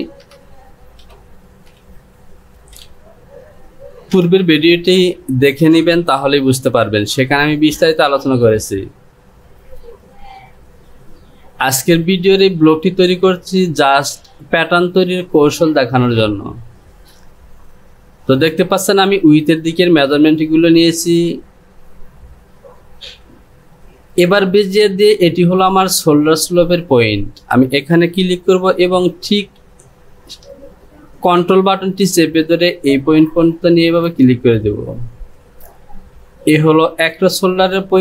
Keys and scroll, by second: 0.2 KP_1, 0.5 KP_0.